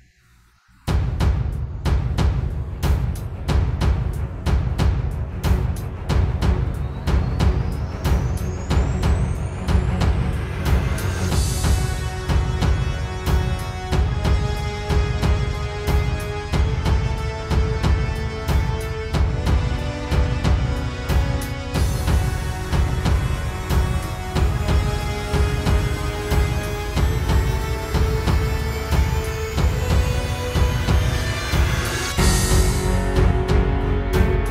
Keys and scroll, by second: 6.7 super+", 7.1 alt+super+space, 7.3 alt+super+space, 7.4 alt+super+space, 7.7 alt+super+space, 9.7 super+", 13.8 super+g, 14.4 super+], 14.7 super+[, 14.9 super+], 16.6 super+", 16.9 space, 17.6 space, 17.9 space, 18.1 space, 18.9 super+space, 21.1 space, 21.6 super+", 22.2 super+", 22.4 super+;, 22.5 super+", 22.8 space, 23.4 space, 23.9 super+z, 24.8 space, 25.4 super+space, 25.6 super+space, 28.2 super+[, 29.2 space, 30.5 super+space, 30.7 super+space, 32.1 super+z.